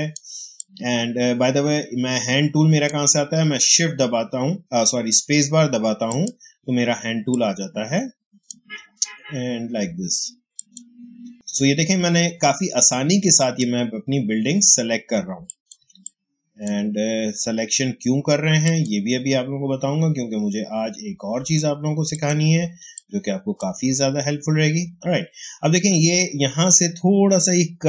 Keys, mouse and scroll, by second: 0.5 click, 0.6 space, 2.1 space, 6.0 click, 6.7 space, 10.5 click, 11.1 space, 15.4 click, 15.7 space, 15.9 click, 16.3 space, 18.5 click, 22.0 click, 22.7 space, 22.9 click, 23.2 space.